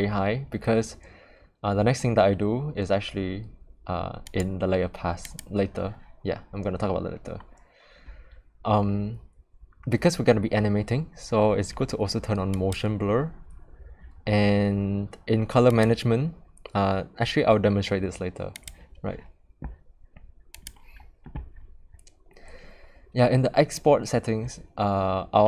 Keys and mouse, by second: 4.2 click, 12.5 click, 15.7 click, 18.5 click, 20.5 click.